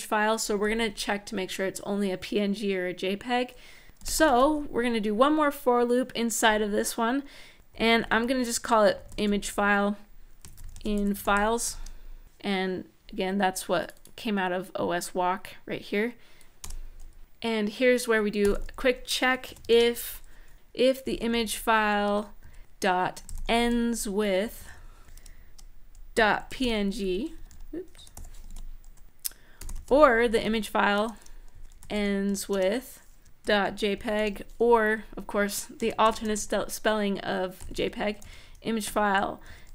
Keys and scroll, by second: 3.6-4.4 typing, 7.3-11.6 typing, 16.4 Return, 17.9-27.9 typing, 21.8 Tab, 27.1 Left, 27.2 Left, 28.2 super+Right, 29.0-30.7 typing, 32.3-34.4 typing, 34.6 End, 34.8 End, 35.5-39.7 typing, 38.6 Tab.